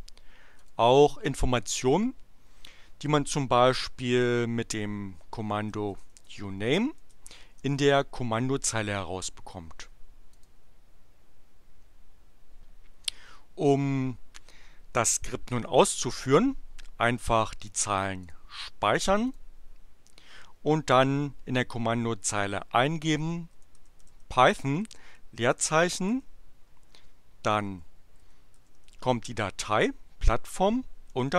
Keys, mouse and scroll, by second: 0.6 click, 5.4-7.8 typing, 10.3 click, 18.2 click, 19.4 click, 22.8-24.7 typing, 25.8 p, 26.1 l, 27.6-29.6 typing, 31.0-31.3 typing.